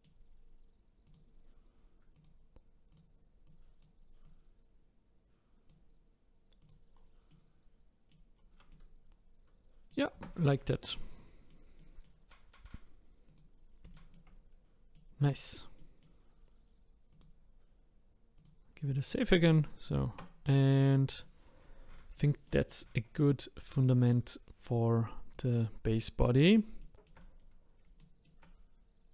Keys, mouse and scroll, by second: 1.0 click, 1.5-2.1 scroll up 2, 2.1 click, 2.9 click, 4.2-6.7 drag, 6.9-7.3 scroll down 3, 7.3-8.3 middle drag, 8.3-8.7 scroll down 3, 8.7-10.1 middle drag, 10.1 Tab, 10.6-10.9 scroll down 2, 10.9-13.2 middle drag, 13.2 click, 13.9 shift+middle click, 14.4-14.9 scroll up 3, 14.9 middle click, 15.5 scroll down 1, 15.8-17.1 middle drag, 17.1-19.0 drag, 19.0 middle click, 19.4 click, 19.7 middle click, 20.1 Tab, 20.5-21.6 middle drag, 21.6 scroll up 1, 22.1-25.3 middle drag, 25.3 click, 26.0-26.4 scroll up 3, 26.8 shift+middle click, 27.4-27.9 scroll down 1, 27.9 scroll down 1, 28.0 shift+middle click, 28.6-29.1 scroll down 1.